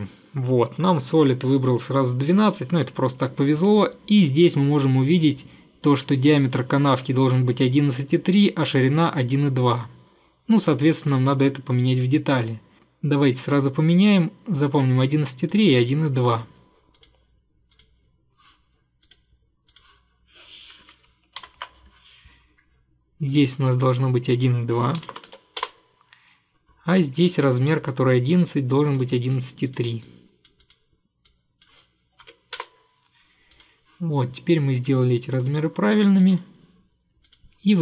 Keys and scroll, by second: 21.6 ctrl+8, 24.9-25.9 typing, 32.4 typing, 32.7 Return.